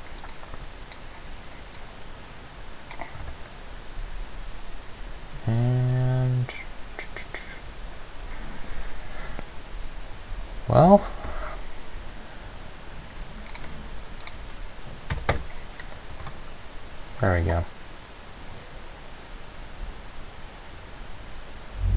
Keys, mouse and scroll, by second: 0.5 click, 2.0 click, 3.4 alt+a, 11.2 Escape, 13.8 click, 14.6 click, 16.5 alt+a.